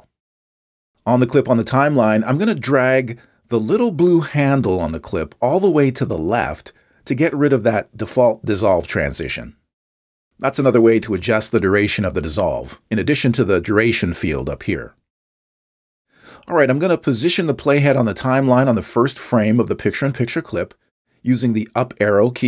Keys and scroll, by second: 21.8 Up.